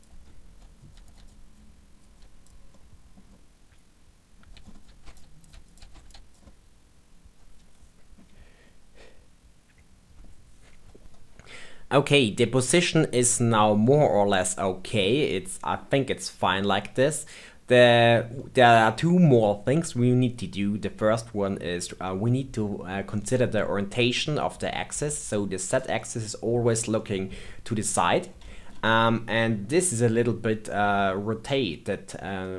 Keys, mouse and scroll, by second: 0.0-1.5 typing, 0.5 click, 1.1 click, 1.4 click, 2.1 click, 2.5 scroll down 2, 2.7 middle click, 3.2 scroll up 3, 3.3 middle click, 4.4 click, 4.5-6.1 typing, 4.6 middle click, 5.1 click, 5.4 click, 5.7 click, 6.0 drag, 6.3 scroll down 3, 6.4 middle click, 8.2 scroll up 3, 8.5 scroll down 2, 8.6 middle click, 12.1-15.1 middle drag, 18.3-22.0 middle drag, 22.0-25.0 scroll up 2, 25.9-31.8 middle drag.